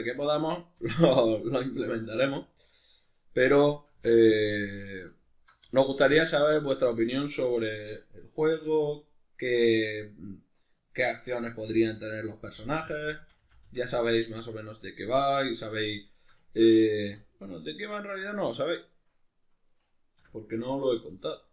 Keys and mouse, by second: 0.3 click, 0.5-1.6 middle drag, 0.8 r, 1.6 click, 1.9-2.9 middle drag, 2.3 3, 3.1 shift+right click, 3.5 shift+right click, 3.7 shift+right click, 3.9 x, 5.3 alt+right click, 5.7 x, 6.5-9.1 middle drag, 8.5 2, 9.1 right click, 10.3 right click, 11.0 shift+right click, 11.6 f, 12.1 right click, 12.5 f, 14.1-17.3 middle drag, 17.0 3, 17.3 right click, 18.2-19.4 middle drag, 19.4 right click, 20.2 l, 20.4-21.5 middle drag, 21.1 g.